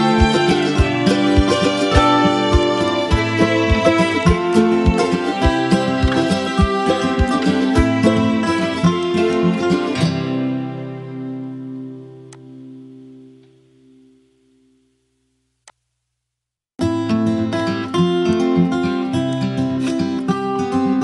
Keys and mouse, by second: 1.9 space, 2.3 click, 2.4 space, 2.6 click, 2.7 space, 3.9 click, 5.7 Delete, 7.0 click, 7.3 Delete, 8.5 space, 8.7 click, 9.0 space, 12.0 click, 15.4 click, 18.0 click, 19.0 ctrl+click.